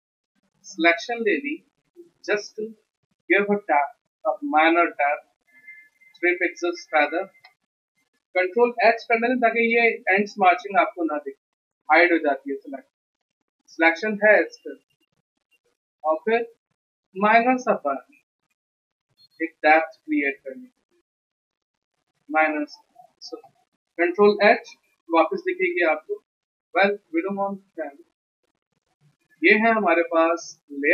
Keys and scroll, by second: 1.2 ctrl+Return, 6.0 3, 9.3 ctrl+h, 24.6 ctrl+h, 26.1 ctrl+d, 27.7 Delete.